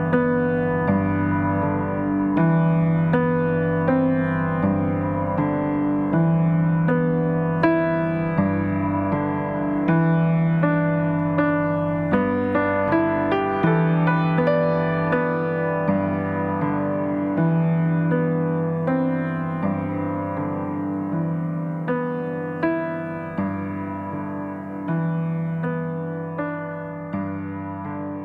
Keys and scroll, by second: 19.3 Delete.